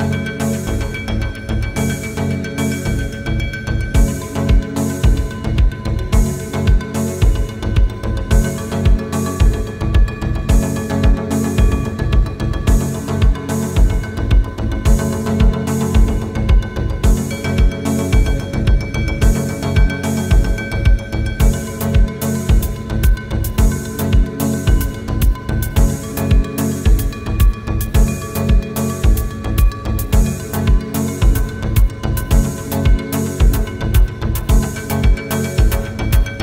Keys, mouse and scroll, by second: 0.4 click, 4.3-5.3 drag, 10.9-16.1 typing, 18.9-21.9 typing, 23.0-23.9 typing, 25.4 click, 29.3-30.8 drag, 35.2 click.